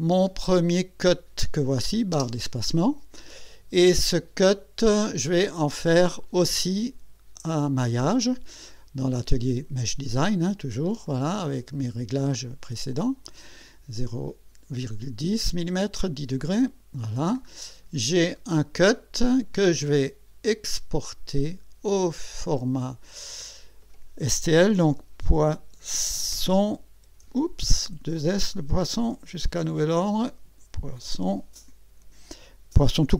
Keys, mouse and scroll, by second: 1.5 click, 2.1 space, 11.1 click, 16.4 click, 17.4-18.5 scroll down 3, 19.2 click, 20.9 click, 22.5 click, 24.6-26.3 typing, 27.7 Insert, 29.0 BackSpace, 30.7-31.6 typing.